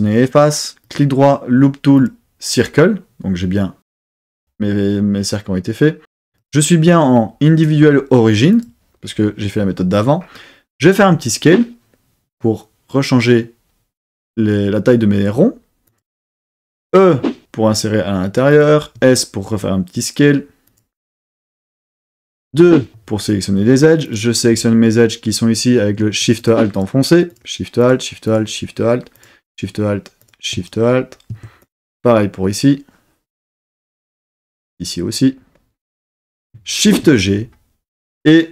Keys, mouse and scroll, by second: 0.8-2.3 right drag, 6.3-8.6 drag, 11.0 s, 15.8 click, 16.9 e, 18.5 click, 19.0 s, 20.6 click, 22.5 2, 24.0 click, 26.3 alt+shift+click, 26.7 alt+shift+click, 27.3 alt+shift+click, 27.8 alt+shift+click, 28.2 alt+shift+click, 29.1 alt+shift+click, 30.2 alt+shift+click, 31.6 alt+shift+click, 34.3 alt+shift+click, 36.8 shift+g.